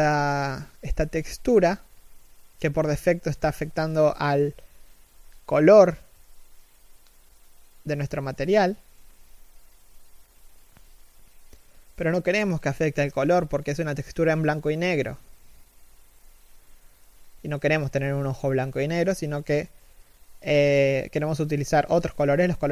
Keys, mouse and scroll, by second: 8.3 scroll up 1, 12.6 scroll down 1.